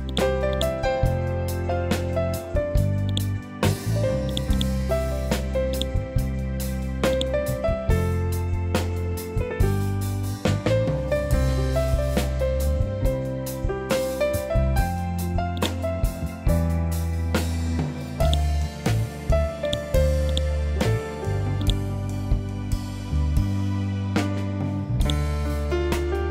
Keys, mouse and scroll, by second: 0.0 click, 0.4 right click, 3.0 click, 4.4 right click, 5.6-12.7 drag, 15.5 right click, 21.5 right click, 24.9 click.